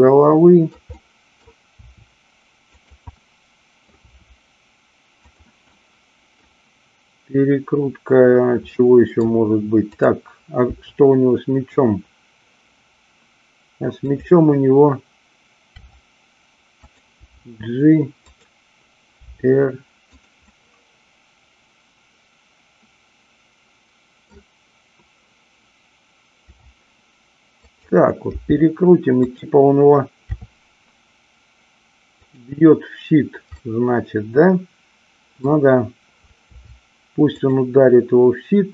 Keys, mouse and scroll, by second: 0.5 middle click, 0.8 middle click, 1.7 r, 2.7 click, 3.1 middle click, 5.2 click, 5.7 middle click, 8.7 middle click, 10.0-11.2 drag, 11.2 r, 14.1 click, 15.7 r, 17.2 g, 18.2 click, 19.2 r, 20.1 click, 20.5-24.4 middle drag, 26.5 r, 27.6 click, 28.4 g, 30.4 r, 33.6-35.4 middle drag, 36.5 r, 37.4 click.